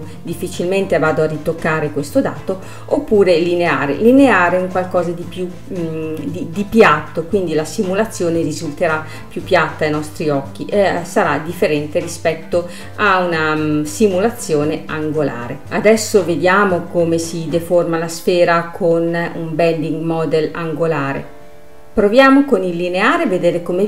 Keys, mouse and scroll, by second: 1.0 space, 3.3-4.4 drag, 4.4 scroll up 3, 5.4 space, 7.1 space, 9.8-12.8 drag, 13.4 space, 15.2 middle click, 15.6-16.8 scroll up 1, 16.8-18.6 middle drag, 18.6-22.0 drag, 22.0 space.